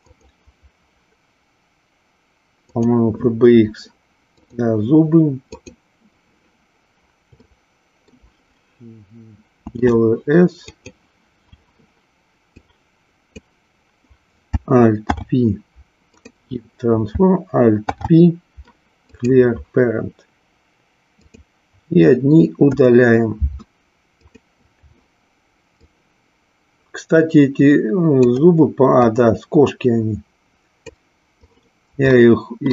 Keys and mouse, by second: 7.4-8.2 shift+middle drag, 9.6 s, 10.9 click, 12.5 click, 15.0 alt+p, 17.7 alt+p, 21.1 click, 22.6 Delete, 24.3 click, 25.7-28.4 drag, 29.0-30.8 drag, 32.1-32.7 shift+middle drag.